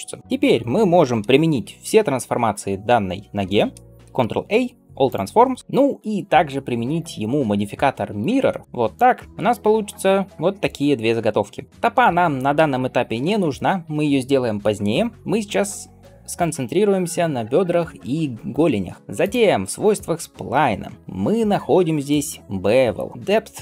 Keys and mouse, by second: 4.1 ctrl+a, 4.4-5.6 middle drag, 5.6-11.7 right drag, 8.1-11.7 drag, 8.1-11.7 middle drag, 19.2-20.9 right drag.